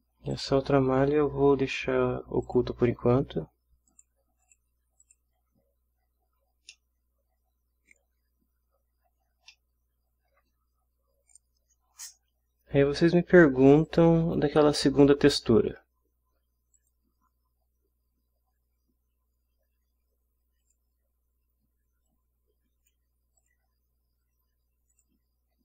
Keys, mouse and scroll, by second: 0.3 click, 0.8 scroll down 1, 1.4 scroll up 1, 2.4 click, 3.9 click, 4.4 scroll down 1, 4.4 click, 5.0 click, 6.7-9.0 middle drag, 9.2 ctrl+scroll up 1, 9.5 ctrl+scroll down 1, 9.5 ctrl+middle click, 10.2 ctrl+scroll up 1, 10.4-13.9 ctrl+scroll down 1, 13.9 click, 16.7 click, 20.6 click, 22.1-23.1 drag, 23.4 click, 24.9 click.